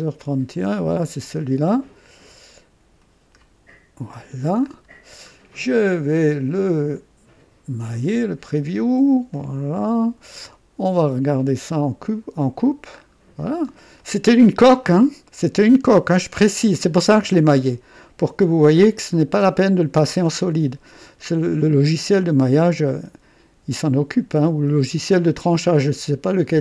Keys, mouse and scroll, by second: 1.2-3.6 drag, 4.6 scroll up 2, 5.0 middle click, 5.0 scroll down 1, 6.9 click, 9.3 click, 11.2-12.8 drag, 12.9-13.8 scroll up 2, 14.0 right click, 14.8-17.0 drag, 18.0-26.6 drag.